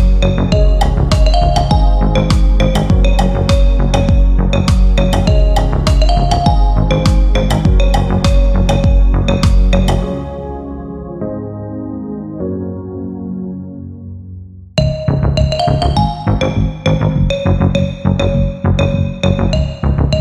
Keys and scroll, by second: 15.8 F3, 18.6 F4.